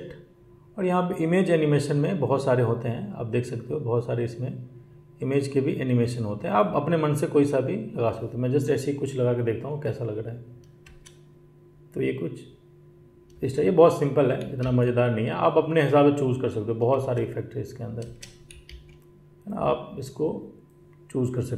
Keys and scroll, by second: 10.8 space, 13.6 space, 14.4 ctrl+z, 16.8 space, 18.5 z.